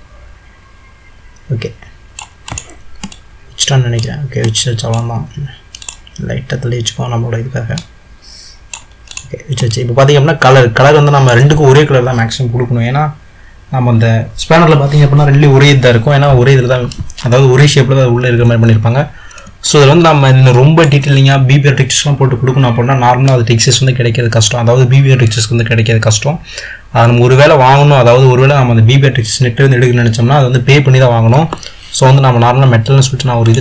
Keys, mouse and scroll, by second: 0.0-0.4 drag, 2.5 click, 3.2-5.9 middle drag, 5.9 click, 7.9 click, 9.3 click, 9.8-12.9 middle drag, 19.8-22.8 middle drag.